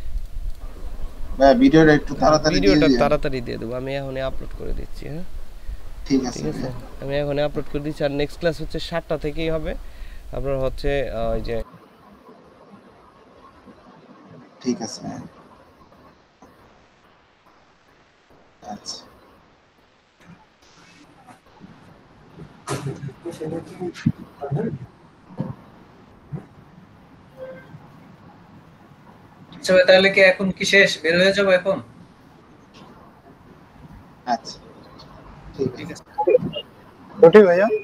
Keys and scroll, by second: 0.6 Delete.